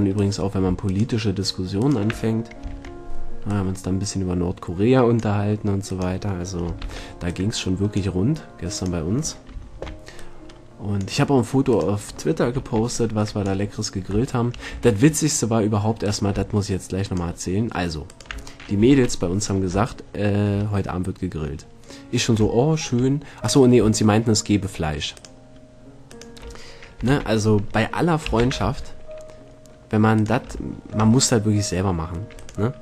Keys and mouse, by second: 0.4-3.6 right drag, 2.9 ctrl+l, 6.0-7.4 drag, 7.0 ctrl+l, 9.8 ctrl+l, 12.8 ctrl+l, 13.9 click, 14.9 a, 19.1 ctrl+l, 23.6 middle click, 27.2 ctrl+l, 28.6 shift+d, 30.4-32.2 drag, 32.6-32.8 right drag.